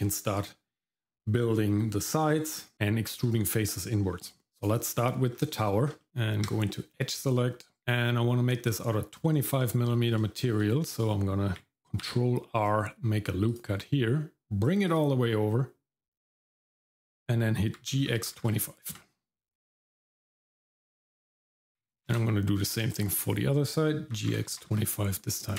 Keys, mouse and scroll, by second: 4.5 scroll down 1, 4.6 click, 5.0 middle click, 5.3 scroll up 1, 5.6 shift+middle click, 6.0 middle click, 6.1 Tab, 7.8 shift+middle click, 10.3 shift+middle click, 12.0 ctrl+r, 17.8 g, 22.1 ctrl+r, 24.1 g.